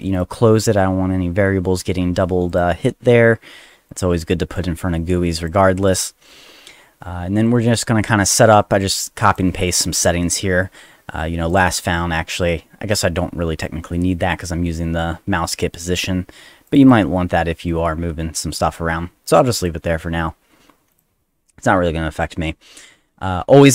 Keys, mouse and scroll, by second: 0.1 click, 2.5 click, 3.9 click, 4.3 click, 5.4 click, 7.4 click, 7.5 click, 8.6 click, 9.7 click, 11.5 click, 11.7 click, 16.7 click, 16.8 click, 19.6 click, 20.9 click, 23.6 click.